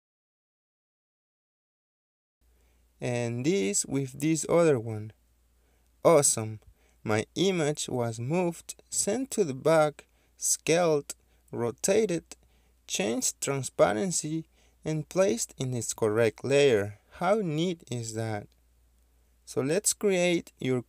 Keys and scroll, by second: 20.7 Escape.